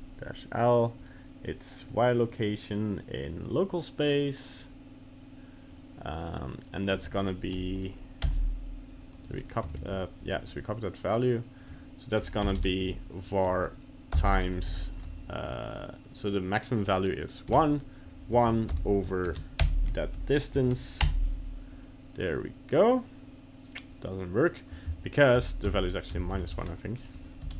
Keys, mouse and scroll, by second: 12.6 BackSpace.